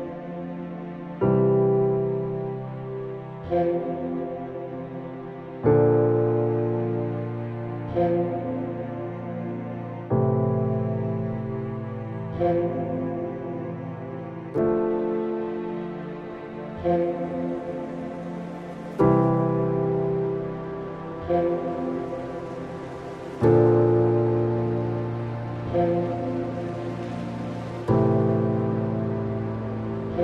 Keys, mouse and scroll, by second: 2.6 click, 4.6 click, 6.7-8.2 drag, 9.9 click, 11.4 n, 12.2-14.9 middle drag, 14.9-15.2 scroll up 1, 18.0 click, 19.2-21.3 drag, 22.5 click, 23.2-24.2 middle drag, 24.2-24.9 scroll up 7, 25.4-25.7 scroll up 1, 25.7 alt+click, 27.1-27.7 scroll down 5, 27.8-28.9 middle drag, 28.9 click.